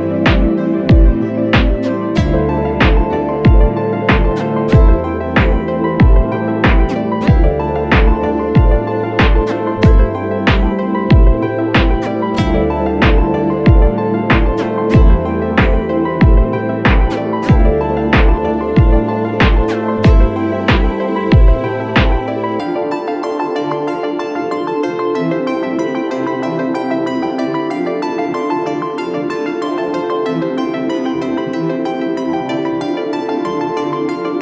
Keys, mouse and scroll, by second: 16.7 ctrl+z, 27.2 right click, 28.5 double click.